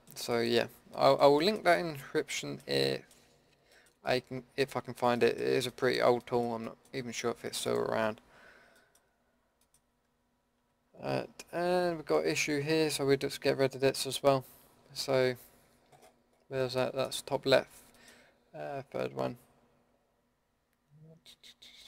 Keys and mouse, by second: 7.6-10.6 middle drag, 10.6 KP_Decimal, 13.7-15.3 middle drag.